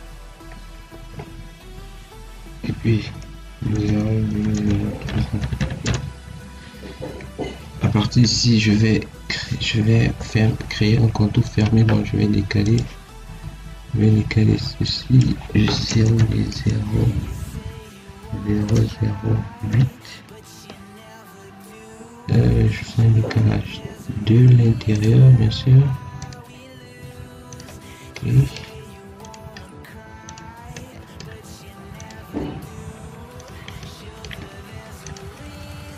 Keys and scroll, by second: 3.6 0, 4.1 ., 4.4 0, 5.7 Return, 11.9 Escape, 15.8 0, 16.1 ., 16.4 0, 17.9 0.